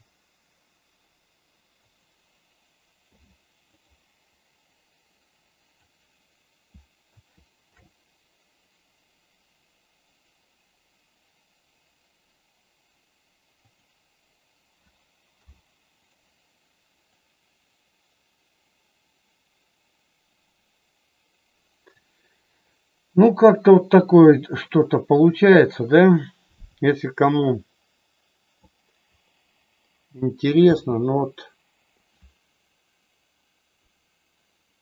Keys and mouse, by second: 1.8 click, 3.1 i, 4.7-5.8 drag, 7.7 shift+f, 13.5 click, 15.3 i, 17.2-21.9 drag, 27.2-28.7 drag, 30.7 space.